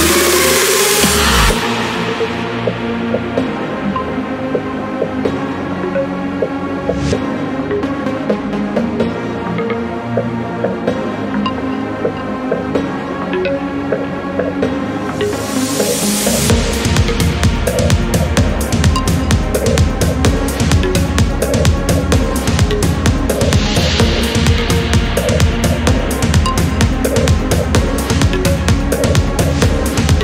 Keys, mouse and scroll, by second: 0.6 click, 2.3 click, 2.9 click, 4.0 right click, 4.8 click, 5.7-6.2 scroll up 1, 6.7 click, 9.2-12.1 drag, 13.3 click, 15.3 click, 16.2 click, 16.6 click, 17.4-17.8 scroll down 2, 18.0 click, 20.8 scroll down 1, 21.3 scroll up 1, 21.9 click, 22.8 click, 24.2 click, 26.9 click, 27.9 1, 28.5 click, 29.2 1, 29.8 click.